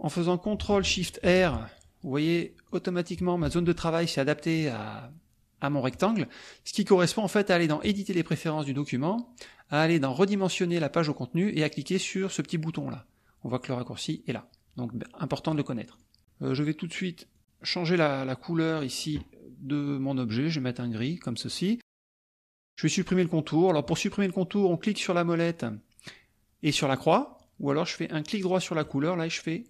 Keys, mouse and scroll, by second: 1.2 ctrl+shift+r, 2.3 click, 3.4 ctrl+z, 7.8 click, 10.4 click, 15.5 right click, 15.9 click, 16.5 click, 17.3 click, 19.4 middle click, 21.9 click, 28.9 right click.